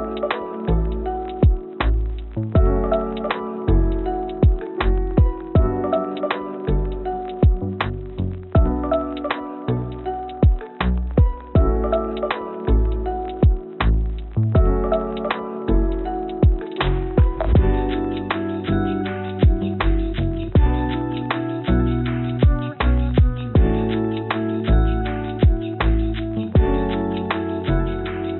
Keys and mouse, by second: 10.2 click, 10.8 click, 12.8-14.4 drag, 14.8-17.8 drag, 21.4-22.9 drag, 24.8 click.